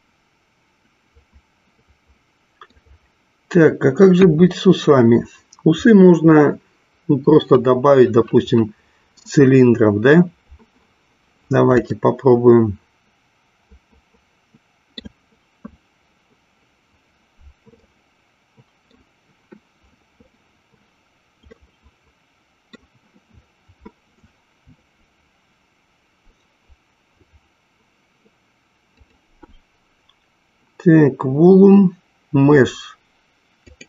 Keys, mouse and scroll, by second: 4.2 KP_1, 12.0-15.3 shift+middle drag, 17.8-19.4 middle drag, 21.8-23.0 middle drag, 28.9-33.8 drag.